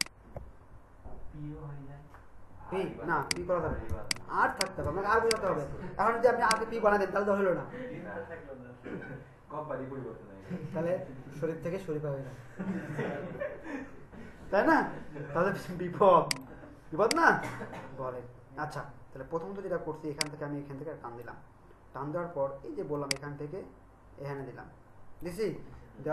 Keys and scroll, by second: 3.9 alt+space.